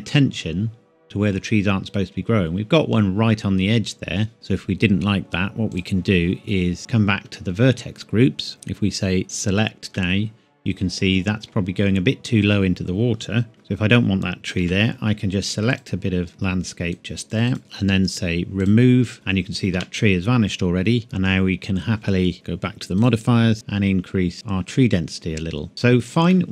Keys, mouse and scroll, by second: 1.7-3.8 scroll up 1, 5.7 click, 7.1 Tab, 7.8-8.5 scroll up 1, 8.5 a, 9.2 click, 9.4-9.9 scroll up 1, 9.9 scroll down 1, 13.5-14.0 scroll up 1, 14.0-14.6 scroll down 1, 15.0 scroll down 1, 15.7 click, 17.5 right click, 18.6 click, 19.7 Tab, 21.0-21.7 scroll down 1, 22.9 click, 25.7-26.1 scroll up 1, 26.3 middle click.